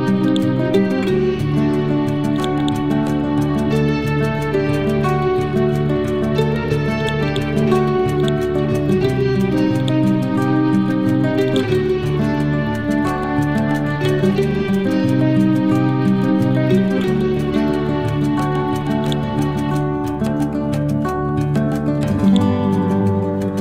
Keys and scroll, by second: 4.4 F12, 5.1 2, 5.3 Return, 12.3 ctrl+z, 13.1 F12, 14.3 6, 14.6 Return, 16.1 F12, 16.9 4, 17.1 Return, 23.1 ctrl+z.